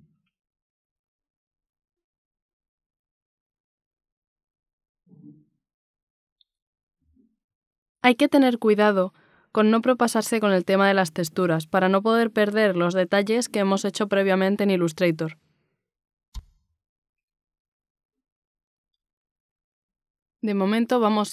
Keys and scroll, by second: 1.1 b, 9.5 z, 12.7 x, 19.6 z.